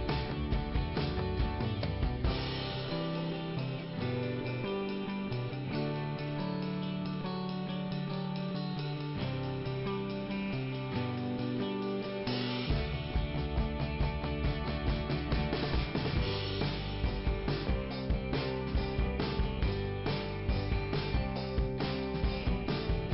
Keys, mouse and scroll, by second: 0.6-1.1 scroll up 1, 1.3 click, 2.6 click, 4.9 scroll down 2, 10.9 click, 12.0 scroll up 1, 12.9 click, 17.1 scroll up 2, 17.6 click, 18.8 click, 20.8-21.3 scroll down 1, 21.3 scroll down 1, 22.9 click.